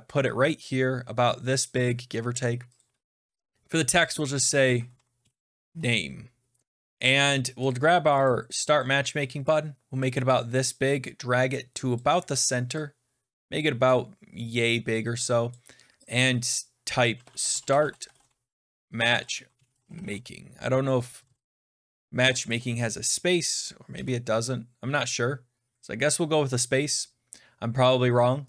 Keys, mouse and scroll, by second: 1.5 click, 2.7 click, 4.1-6.1 typing, 7.6 click, 8.2 click, 9.9 click, 11.8 click, 13.3 click, 15.4 click, 16.0 click, 16.8-22.2 typing, 21.1-21.4 Left, 22.2 Left, 23.8-24.3 BackSpace, 27.8 click.